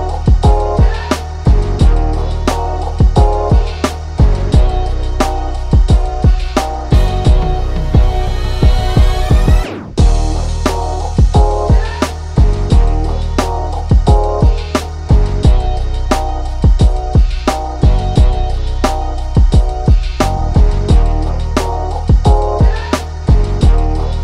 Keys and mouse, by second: 1.1-4.0 drag, 4.2 ctrl+z, 4.9-7.1 drag, 8.0-12.9 alt+drag, 13.2 click, 15.9 click, 16.7 right click, 17.1 click, 19.7 click, 20.4-22.1 drag.